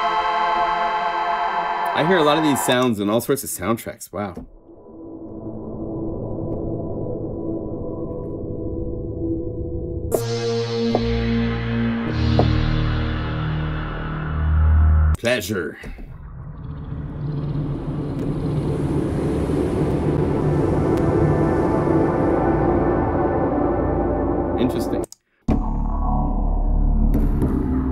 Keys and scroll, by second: 17.0 F4.